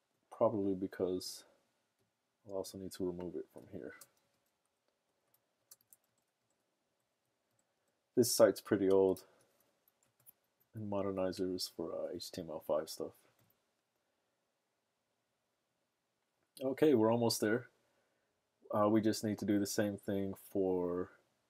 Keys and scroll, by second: 5.0-6.3 typing, 6.9 Down, 7.1 Down, 7.4 BackSpace, 7.7 BackSpace, 8.1 BackSpace, 9.3 super+s, 10.5 super+Tab.